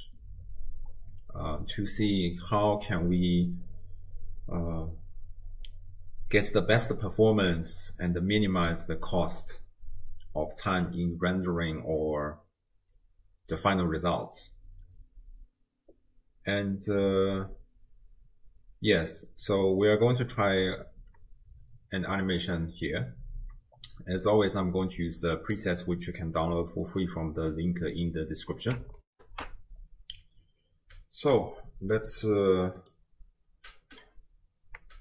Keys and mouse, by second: 29.1 ctrl+alt+shift+w, 29.2 ctrl+alt+shift+q, 32.8 click.